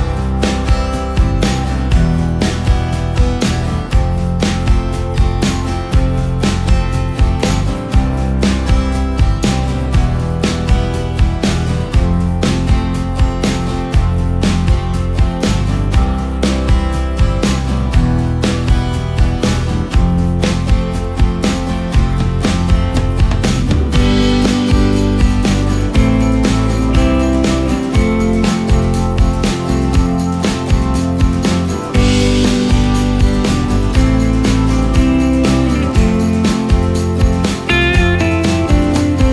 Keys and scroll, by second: 11.5 ctrl+v, 18.2 z, 22.6 F3, 24.7 space, 25.4 ctrl+space, 28.9 shift+space, 31.0 space, 31.8 ctrl+space.